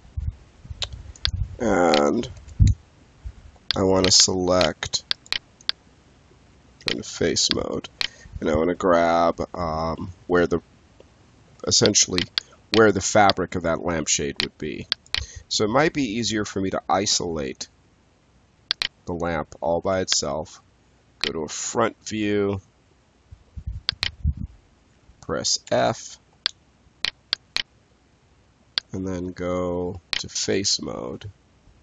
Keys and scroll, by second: 2.3 space, 19.8 space, 25.6 f.